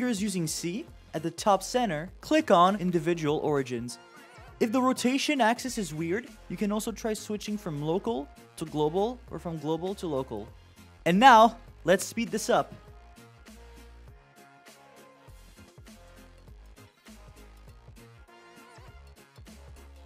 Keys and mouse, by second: 3.8-6.0 drag, 6.8-8.0 drag, 8.8-10.1 drag, 10.8 click, 10.9 click, 11.0 middle click, 11.1 click, 11.2 click, 11.2 click, 11.3 click, 11.4 click, 11.4 click, 11.7 KP_0, 11.8 click, 11.8 click, 11.9 click, 12.0 click, 12.0 click, 12.2 click, 12.2 click, 12.3 click, 12.4 click, 12.6 click, 12.7 click, 12.8 shift+middle click, 12.9 shift+click, 13.1 click, 13.5 shift+middle click, 13.6 shift+middle click, 13.7 click, 14.3 click, 14.6 click, 15.1 shift+middle click, 15.2 click, 15.3 click, 15.5 click, 15.5 shift+middle click, 15.7 shift+middle click, 15.7 click, 15.9 click, 16.1 click, 16.9 click, 17.1 click, 17.5 click, 17.6 click, 17.7 shift+click, 17.8 click, 18.1 shift+middle click, 18.2 click, 18.2 click, 18.6 shift+middle click, 18.8 click, 19.0 click, 19.1 click, 19.3 click, 19.5 click, 19.5 click, 19.8 click, 19.8 click, 19.9 click.